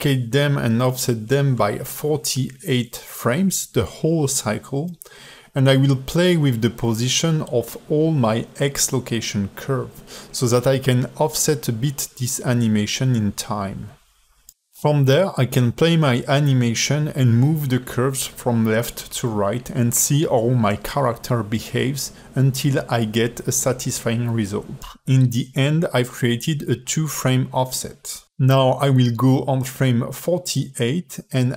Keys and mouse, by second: 8.5 a, 9.0 shift+d, 10.4 a, 10.8 g, 11.9 space, 14.1 g, 27.9 space, 28.5 a, 28.6 a, 29.1-29.7 drag, 30.3-30.6 drag, 31.3 i.